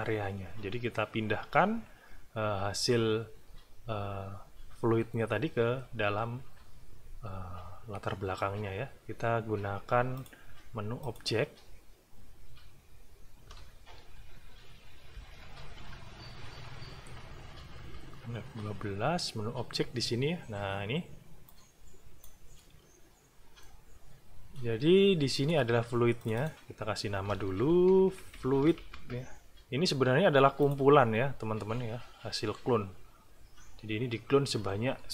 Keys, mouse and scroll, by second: 10.1 click, 11.0 click, 14.1 Left, 15.1 Right, 15.7 Page_Up, 17.8 F12, 21.5 click, 23.6 click, 24.7 middle click, 25.3 click, 26.2 click, 27.5-29.2 typing, 30.6 click.